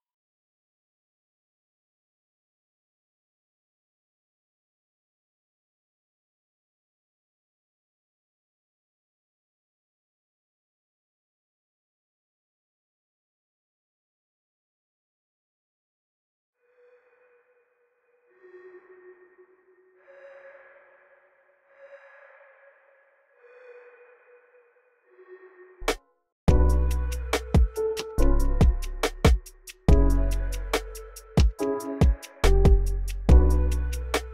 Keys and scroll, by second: 1.7 typing, 2.1 shift+super+BackSpace, 2.9 Right, 3.7-4.5 typing, 4.9 alt+r, 8.0 alt+r, 9.2 alt+r, 10.4 s, 11.3 super+f, 11.8 super+f, 15.3 s, 15.7 s, 16.3 space, 24.9 super+w, 25.4 super+w, 26.2 space, 27.5 alt+super+s, 27.8 x, 29.2 x, 30.4 x.